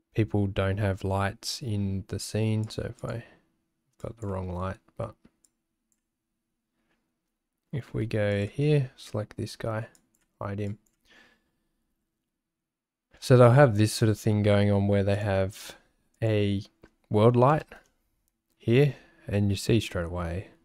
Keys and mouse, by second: 2.6 click, 3.0 click, 4.0 click, 7.9 w, 8.3 click, 9.9 click, 15.2-17.8 drag.